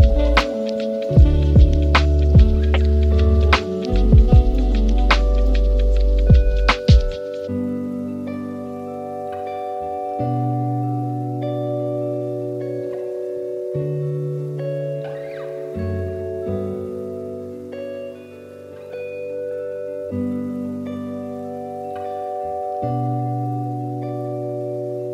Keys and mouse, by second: 1.6 click, 3.6-5.1 drag, 5.9 g, 9.1-10.2 drag, 10.7 middle click, 11.6 g, 13.7 middle click, 14.6 g, 15.8 g, 18.7-19.1 middle drag, 19.8 KP_7, 20.9 g, 22.3 shift+d, 24.7 shift+d.